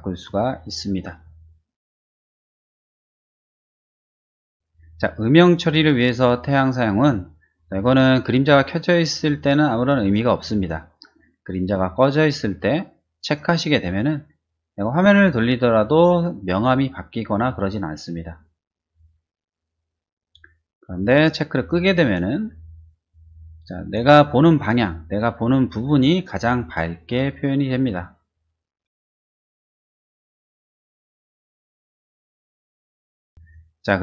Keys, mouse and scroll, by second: 2.3 click, 3.5 click, 8.7 click, 9.4 click, 10.0 click, 10.5 click, 11.8 click, 13.2 click, 14.7-16.2 middle drag, 16.9-18.3 middle drag, 18.7-20.2 middle drag, 21.5 click, 22.3 middle click, 23.9 shift+middle click, 24.5 shift+middle click, 26.1 shift+middle click, 26.5 shift+middle click, 28.0 middle click, 28.9 shift+middle click, 29.1 shift+middle click, 29.9 middle click, 30.3 middle click, 30.6 shift+middle click, 31.0 shift+middle click, 31.4 shift+middle click, 32.0 shift+middle click, 33.4 click.